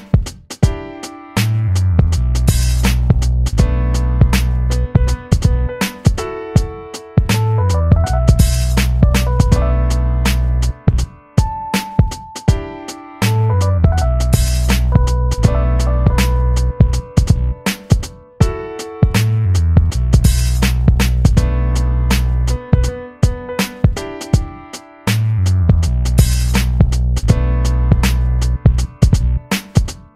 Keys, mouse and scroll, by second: 2.0 s, 7.4 e, 11.7 click, 13.1 b, 16.4 e, 18.7 s, 21.9 e, 27.6 click, 28.8 click, 29.7 click.